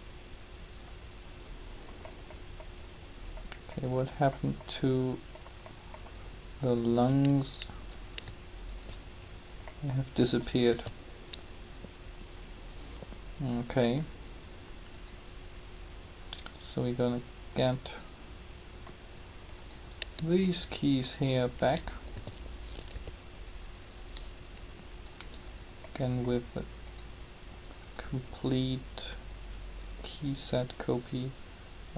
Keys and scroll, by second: 10.7 alt+a, 22.1 shift+a, 22.9 b.